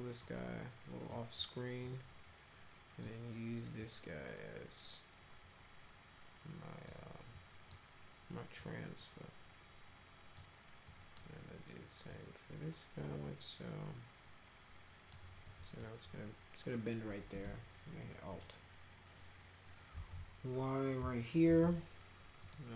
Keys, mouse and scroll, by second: 0.2 click, 1.8-3.0 drag, 3.8-6.9 drag, 7.4 click, 8.6-10.4 drag, 10.9 drag, 12.1-15.1 drag, 15.5 click, 19.9 alt+r, 21.5 y, 22.5 click.